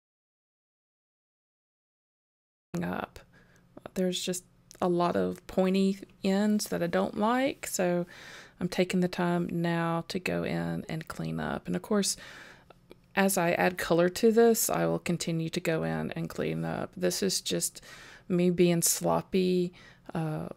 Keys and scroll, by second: 2.0 super+j, 2.2 super+z, 2.6 super+j, 4.5 super+j, 5.1 super+z, 6.0 super+j, 6.7 super+j, 8.1 super+j, 8.9 super+z, 9.5 super+0, 10.5 super+j, 11.3 super+z, 11.8 super+j, 12.4 super+j, 12.7 super+z, 13.9 super+j, 14.3 super+j, 14.8 super+j, 15.3 super+j, 16.9 super+j, 17.5 super+j, 18.0 super+j, 18.3 super+j, 18.7 super+z, 19.7 super+j, 20.0 super+j.